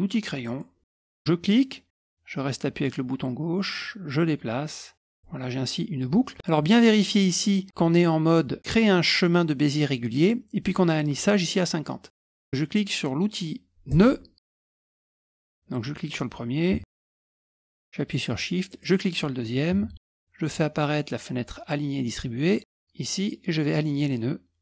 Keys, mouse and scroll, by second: 0.4 click, 1.4-5.5 drag, 13.9 click, 14.7 click, 15.2 click, 15.6 click, 16.5 click, 18.7 shift+click, 22.6 click.